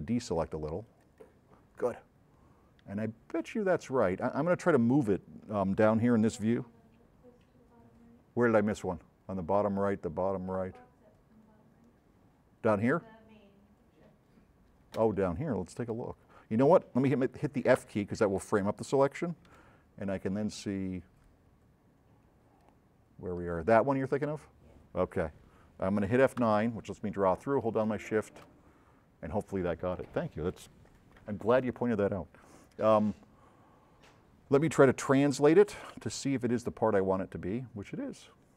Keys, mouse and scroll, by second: 0.1 ctrl+click, 3.8 middle click, 4.4 middle click, 5.0 middle click, 9.1 middle click, 10.5 middle drag, 11.0 middle click, 11.7 middle click, 12.6 middle click, 12.9 middle click, 15.8 s, 17.9 f, 19.5 s, 19.6-20.6 right drag, 26.5 F9, 27.7 shift+click, 35.5 c, 35.9 v, 36.5-38.5 drag.